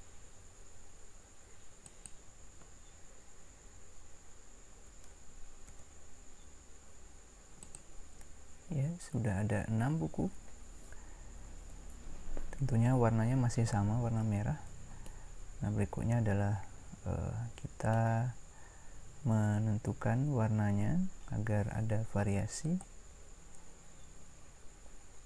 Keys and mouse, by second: 4.8 shift+d, 22.6-25.2 right drag.